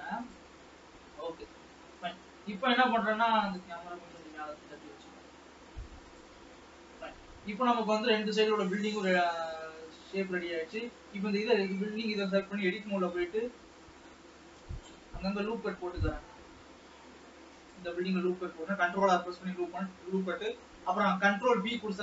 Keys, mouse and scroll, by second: 0.7-1.2 scroll up 2, 1.2 alt+a, 1.7 ctrl+s, 2.1 scroll up 2, 3.4 click, 4.3 g, 6.6 middle click, 7.4 scroll down 2, 7.8 ctrl+s, 8.0-9.4 middle drag, 9.4 click, 9.9 Tab, 10.2 scroll up 1, 10.8 alt+a, 13.7 ctrl+r, 18.5 scroll up 1, 21.7 ctrl+b.